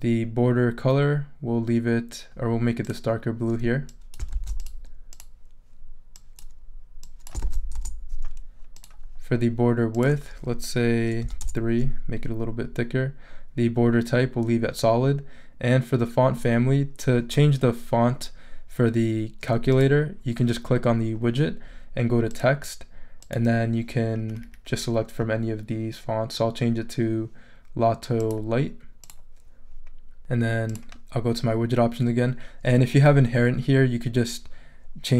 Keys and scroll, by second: 4.3 super+c, 7.4 super+v, 7.7 super+Return, 11.2 3, 11.4 Return.